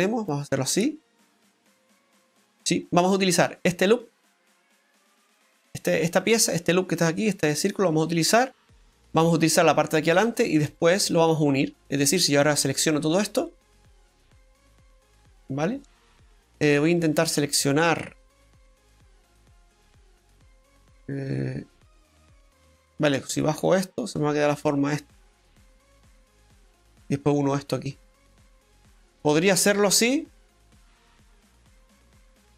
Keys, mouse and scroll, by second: 0.2 click, 0.7-1.4 scroll down 1, 1.4 middle click, 3.5 right click, 3.9 alt+shift+right click, 4.4 alt+shift+right click, 5.3 click, 8.5-8.8 scroll down 2, 8.8 middle click, 12.4 shift+right click, 13.7 shift+right click, 15.2 middle click, 16.0 shift+right click, 17.6 shift+right click, 29.2-29.5 scroll down 1, 29.5 middle click, 31.6 shift+right click, 32.1 middle click.